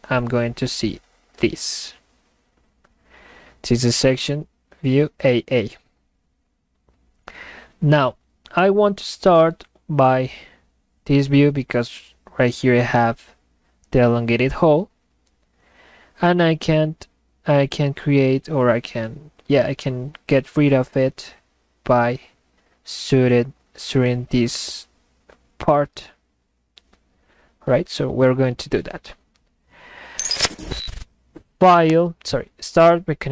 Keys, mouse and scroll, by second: 31.9 click.